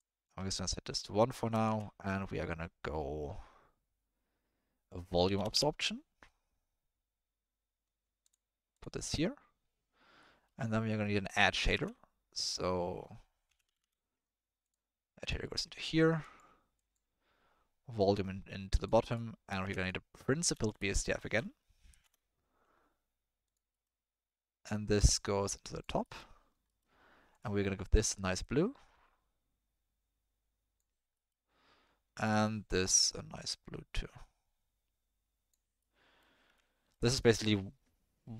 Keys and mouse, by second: 0.7 click, 1.3 click, 1.6 shift+a, 9.1 click, 11.7 shift+a, 13.8 d, 15.6 click, 16.9 click, 18.0-18.8 drag, 19.1 click, 19.6 shift+a, 25.2 click, 26.0 click, 26.8 click, 27.3 click, 35.9 middle click, 36.7 ctrl+middle click, 37.2 middle drag.